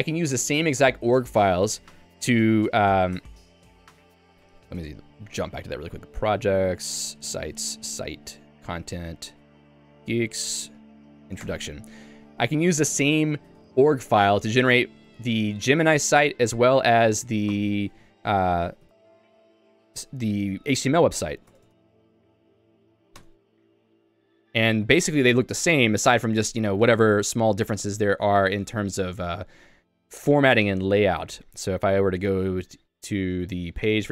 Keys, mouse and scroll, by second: 11.6 Return, 13.5 shift+Tab, 13.7 shift+Tab.